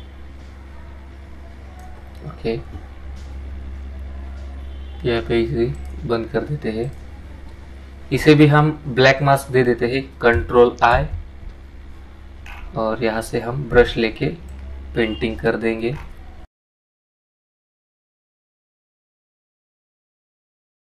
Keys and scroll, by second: 11.1 ctrl+i.